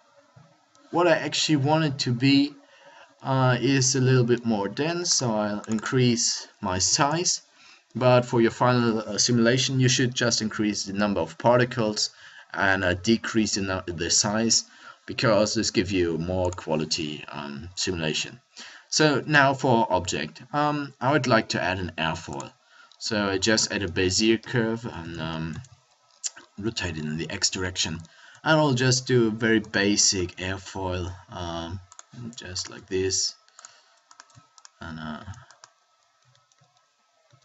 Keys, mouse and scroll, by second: 19.1 shift+a, 24.1 r, 26.9 click, 28.6 Tab, 30.3 r, 32.8 r, 35.1 shift+d, 36.1 r.